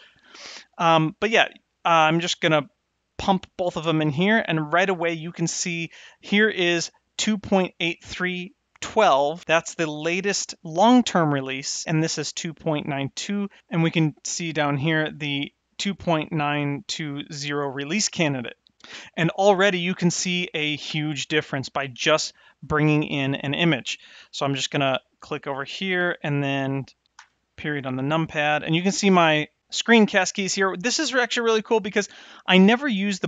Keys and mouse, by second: 24.8 click, 26.0 middle click, 27.1 KP_Decimal.